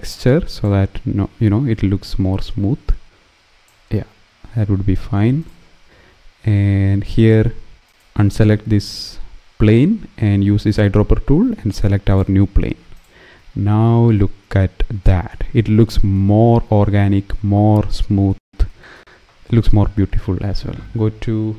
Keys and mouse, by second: 0.6 click, 2.2-3.4 drag, 10.3 click, 11.8 click, 12.6 click, 13.9 middle click, 16.1 shift+middle click.